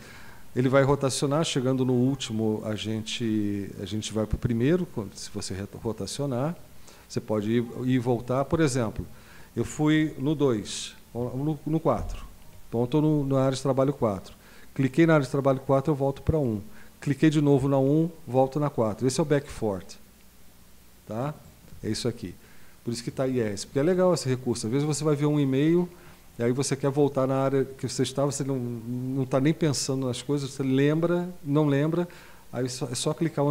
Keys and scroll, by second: 12.0 super+4.